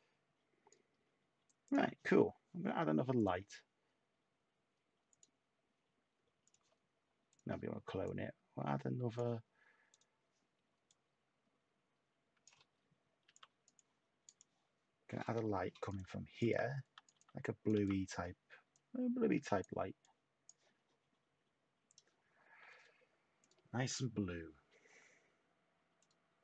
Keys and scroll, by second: 13.2 t, 15.9-17.7 typing.